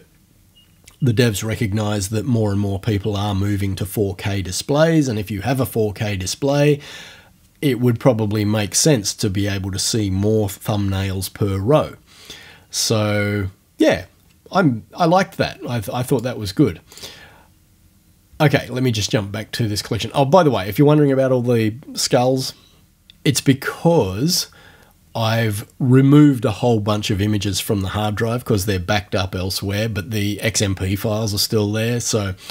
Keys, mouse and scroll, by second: 16.1 click, 16.9 click.